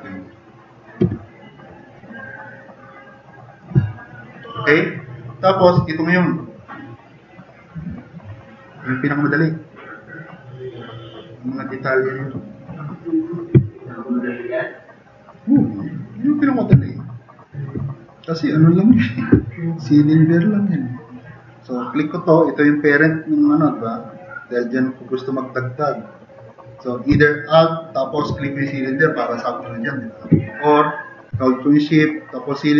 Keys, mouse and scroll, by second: 1.0 e, 4.0-4.9 drag, 13.3 click, 13.7 click, 14.2 click.